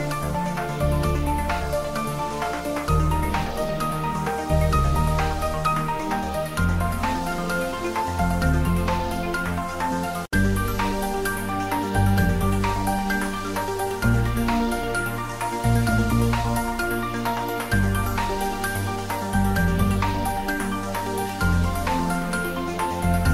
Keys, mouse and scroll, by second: 1.0 Tab, 1.8 click, 3.3 Tab, 3.7 click, 4.9 shift+click, 6.5 shift+middle click, 6.9 shift+click, 8.5 click, 9.5 s, 10.0 click, 10.4 g, 11.5 click, 11.8 ctrl+middle click, 12.2-13.1 typing, 14.4 g, 15.5 click, 15.9 s, 16.4 click, 16.7 ctrl+middle click, 17.2 shift+middle click, 17.8-19.8 typing, 19.4 click, 21.1 click, 21.8 s, 22.2 click, 22.7 g, 23.0 x.